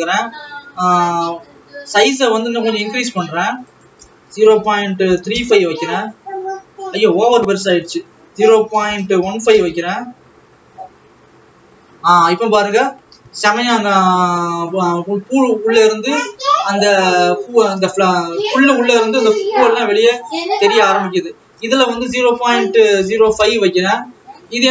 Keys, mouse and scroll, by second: 0.1 click, 2.7-5.4 scroll up 2, 6.0-8.4 drag, 8.7-12.3 drag, 12.8-13.3 scroll down 1, 14.5 ctrl+s, 14.8 alt+a, 15.8 click, 24.2-24.7 drag.